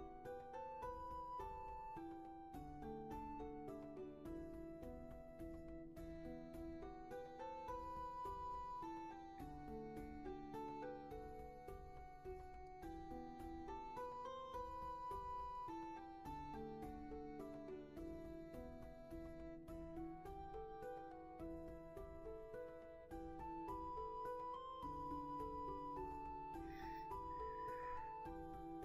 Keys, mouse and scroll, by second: 1.5 ctrl+z, 9.6 ctrl+z, 17.5 ctrl+z, 19.3 ctrl+z.